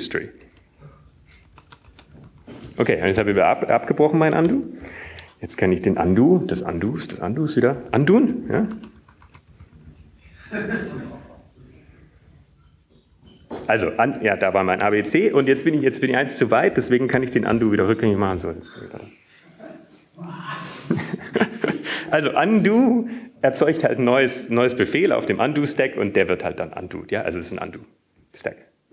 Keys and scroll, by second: 7.4 Return, 7.4 BackSpace, 10.9 ctrl+/, 11.9 ctrl+/, 12.5-14.3 ctrl+/, 17.5 Up, 18.6 Up.